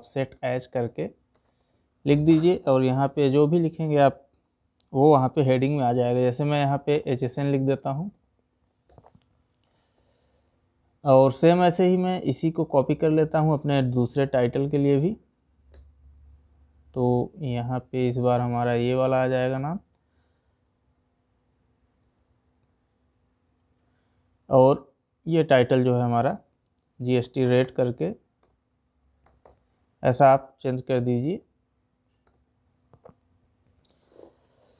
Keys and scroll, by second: 0.8 space, 13.5 ctrl+c, 15.9 ctrl+v, 19.7 ctrl+c, 23.2 ctrl+v.